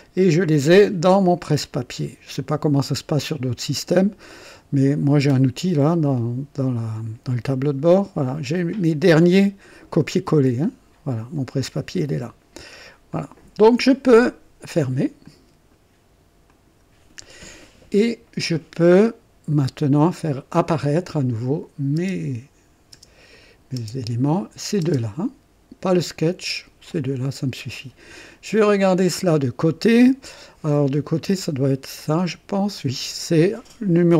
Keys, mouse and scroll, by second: 1.7 click, 13.1 click, 15.2-15.9 drag, 16.5 click, 19.5-20.4 drag, 21.3 click, 22.2 space, 23.1 space, 23.3 click, 23.8 space, 24.4 click, 24.8 space, 26.0-27.0 right drag, 32.0 click.